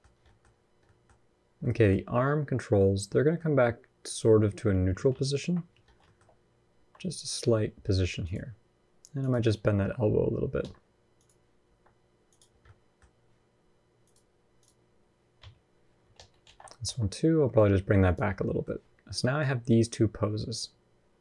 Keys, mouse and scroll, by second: 0.0 middle click, 0.6 middle click, 0.9-1.4 scroll up 1, 1.4 middle click, 1.7 scroll up 1, 2.9 middle click, 3.8 click, 4.9 ctrl+KP_3, 5.7 scroll down 1, 5.8 shift+middle click, 6.5 r, 9.0 click, 9.5 r, 10.9 click, 11.4 r, 12.3 scroll down 3, 12.4 middle click, 12.8-13.8 scroll up 1, 13.8 click, 13.8 scroll up 1, 15.1 KP_3, 15.9 alt+z, 16.6 r, 18.1 scroll down 1, 18.2 middle click, 19.2 click.